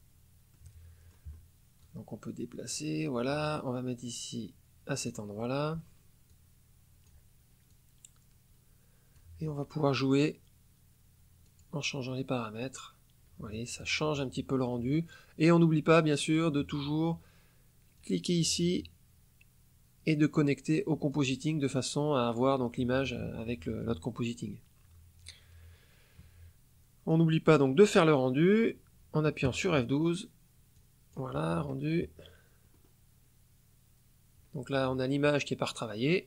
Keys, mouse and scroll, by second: 0.5 middle click, 0.8 click, 1.7-2.9 drag, 4.0-5.2 drag, 6.2-7.2 drag, 7.6-9.3 drag, 9.8 click, 11.4 click, 12.5 click, 15.8 click, 17.9-20.5 drag, 21.0-22.5 drag, 27.0-28.2 drag, 30.7 click, 32.6-33.0 scroll up 1.